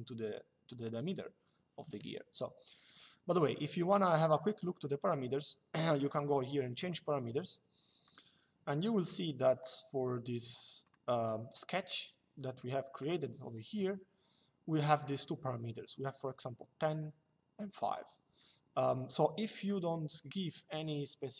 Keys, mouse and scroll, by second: 6.5 click, 7.8 click, 10.5 click, 12.7 click, 19.4 click.